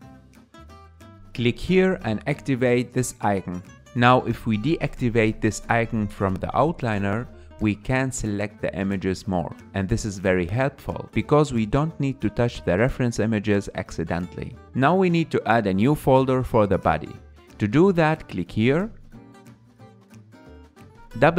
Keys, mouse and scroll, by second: 11.5-21.3 drag.